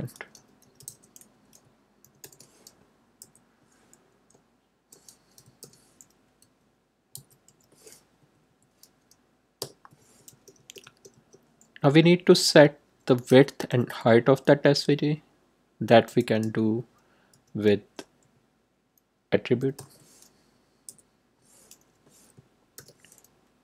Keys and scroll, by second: 0.0-2.1 typing, 3.1 Left, 5.6 shift+', 6.4 s, 7.1 v, 7.4 g, 8.1 Right, 9.5 Return, 10.0 Tab, 13.2 ., 15.8 a, 16.2 t, 17.3 r, 19.3-20.2 typing, 20.8 Left, 22.7-23.6 typing.